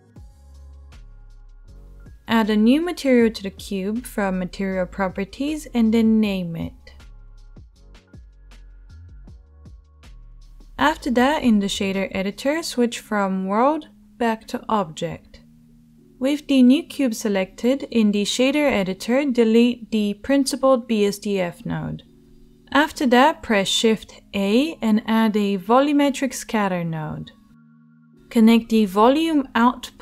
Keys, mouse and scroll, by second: 2.6-4.4 drag, 10.3 t, 13.8-19.3 drag, 13.8-23.0 middle drag, 13.8-30.0 right drag, 21.2 Delete, 23.6 shift+a.